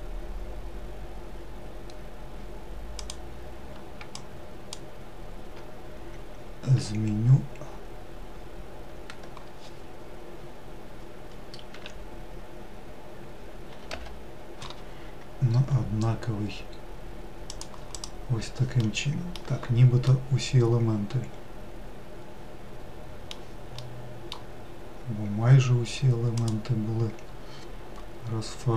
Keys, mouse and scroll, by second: 4.5 shift+click, 6.5 g, 17.8 click, 18.0-18.5 scroll down 2, 18.6 middle click, 19.2-19.8 scroll down 2, 19.8 scroll down 1, 19.8-22.8 middle drag, 23.6 middle click, 24.4-24.8 scroll up 1, 26.2 click, 28.6 click.